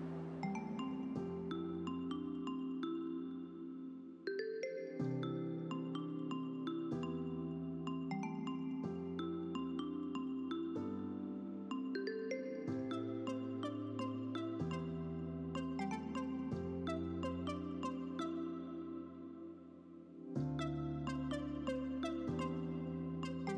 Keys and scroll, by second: 0.9 ctrl+z, 2.0 a, 2.8 v, 7.4 ctrl+alt+c, 7.6 ctrl+alt+f, 14.6 ctrl+alt+z, 14.9 ctrl+alt+r, 16.3 ctrl+d, 16.5 ctrl+d, 16.7 ctrl+d, 17.1 v, 22.8 Up, 22.9 Down, 23.2 Up, 23.3 Up.